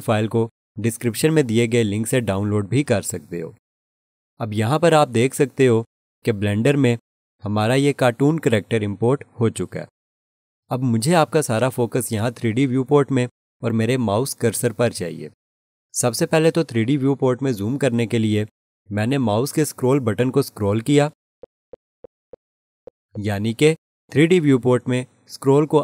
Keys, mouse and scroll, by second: 21.2-25.1 scroll up 1, 25.7-25.8 scroll down 1.